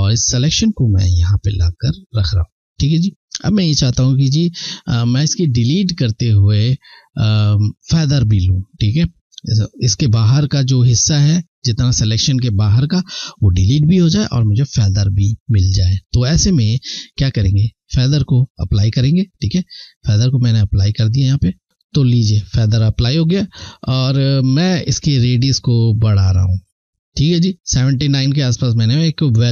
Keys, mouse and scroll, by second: 19.5 click, 25.3 click, 25.6 click.